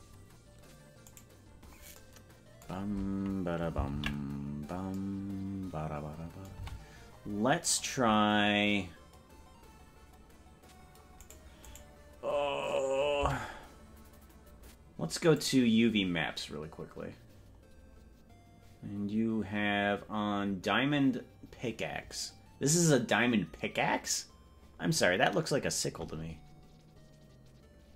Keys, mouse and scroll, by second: 0.1-0.5 scroll up 4, 1.1 right click, 3.9 ctrl+l, 6.5 c, 11.7 right click, 13.3 Tab, 15.3 click, 25.0 scroll down 6.